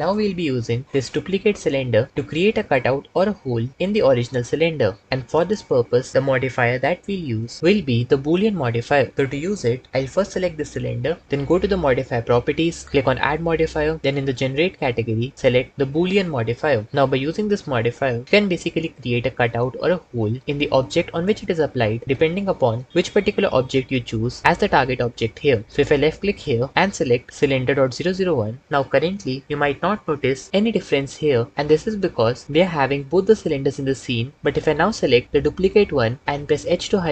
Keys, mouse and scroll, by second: 13.5-16.8 drag, 26.0-28.4 drag, 36.8 h.